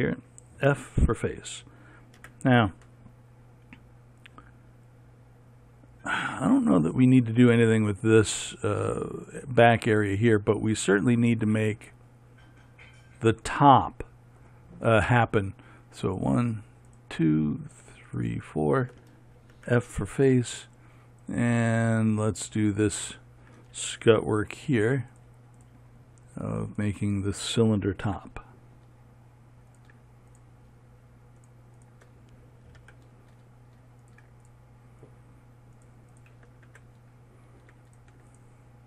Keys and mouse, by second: 1.2 f, 2.8 a, 10.5-16.6 middle drag, 16.6-25.6 right drag, 20.1 f, 24.6 f, 25.6-38.8 drag, 28.6 f, 33.4 f, 37.2 f.